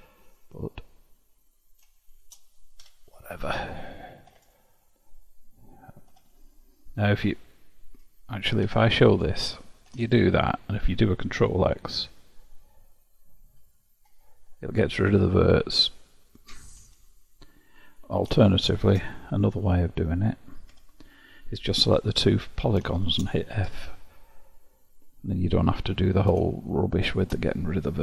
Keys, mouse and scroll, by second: 0.0 1, 1.5 click, 2.8 j, 4.5-6.2 drag, 6.2 3, 7.3 click, 8.7 1, 10.1-13.1 drag, 13.5 ctrl+x, 15.1-16.9 drag, 16.9 1, 17.9 click, 18.7 shift+click, 20.8 j, 22.4 click, 23.7 f, 26.7-28.0 shift+drag.